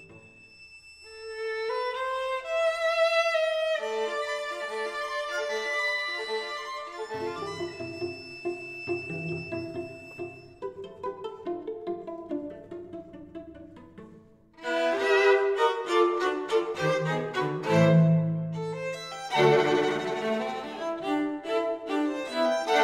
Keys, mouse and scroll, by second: 7.0 middle click, 7.2 middle click, 7.7-10.3 middle drag, 17.0-19.7 middle drag, 19.7 z, 20.7-22.8 middle drag.